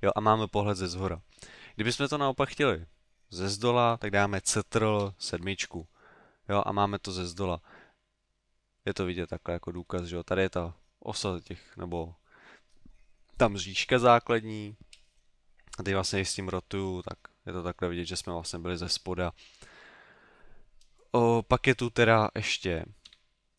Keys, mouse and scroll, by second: 5.0 ctrl+KP_7, 8.0 middle click, 15.7 middle click, 17.0 middle click, 23.1 KP_3.